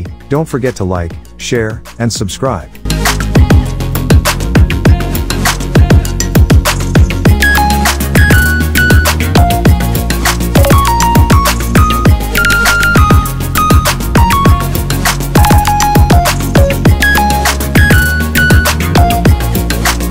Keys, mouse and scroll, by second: 5.8-15.4 drag, 17.7 click, 19.5 click.